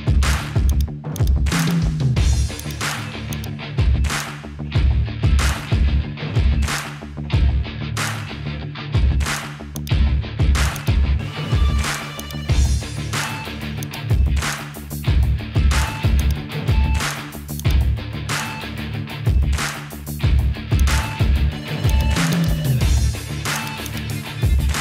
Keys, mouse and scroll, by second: 0.7 click, 1.2 shift+click, 1.6 shift+click, 2.6 shift+click, 3.3 shift+click, 6.5 ctrl+p, 16.2-17.2 drag, 17.6 click, 18.7 Tab, 21.9 click, 23.2 Tab, 23.6 click.